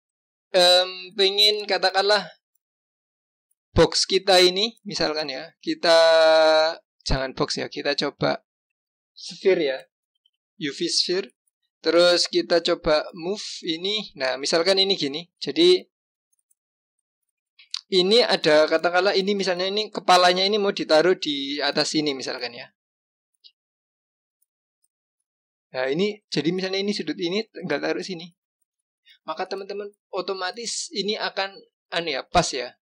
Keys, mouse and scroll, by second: 3.6-6.7 drag, 12.9 g, 17.0 click, 24.6 g, 25.1-28.2 scroll up 2, 29.8 click, 32.3 click.